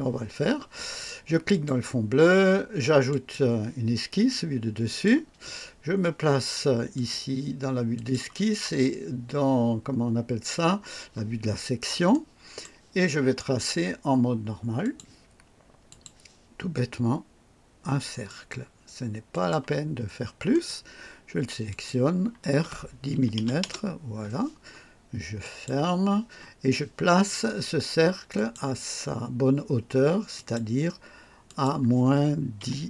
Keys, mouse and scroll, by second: 1.5 click, 3.1 click, 4.9 click, 6.9 click, 7.9 click, 11.4-11.8 scroll up 1, 12.1-12.8 right drag, 14.8 click, 15.9 click, 18.2 click, 19.3 click, 20.1 scroll up 1, 20.5 right click, 21.7 click, 22.5 r, 23.1 KP_1, 23.4 KP_0, 23.6 KP_Enter, 25.4 click, 28.3 click, 30.3 click, 31.4 click, 32.6 KP_Subtract.